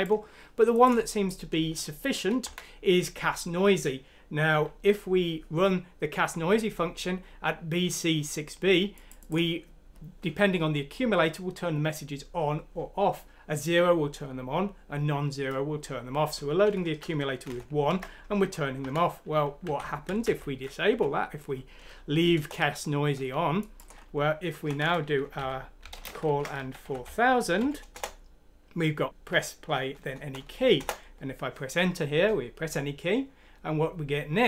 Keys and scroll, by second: 2.5 shift+Right, 17.5 shift+Home, 18.9 Right, 19.6-20.6 typing, 19.9 Down, 20.1 Left, 20.9 F9, 22.3 Return, 24.1-27.6 typing, 27.9 Return, 30.8 Return.